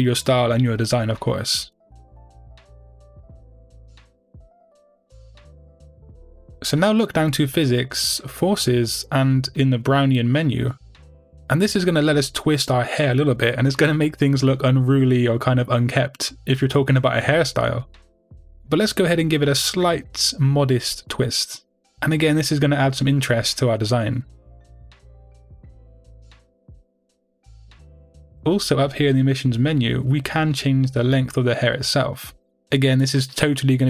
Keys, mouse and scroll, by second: 7.7-10.9 scroll down 2, 10.9-11.9 scroll down 1, 25.5-32.0 middle drag, 29.1-30.1 scroll up 2, 30.1-32.0 scroll up 1, 32.0-33.8 drag.